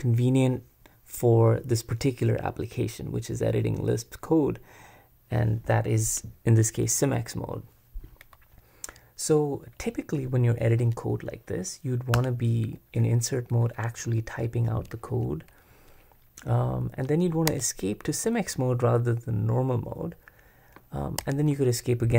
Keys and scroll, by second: 12.1 Return, 17.5 Escape, 21.2 Escape.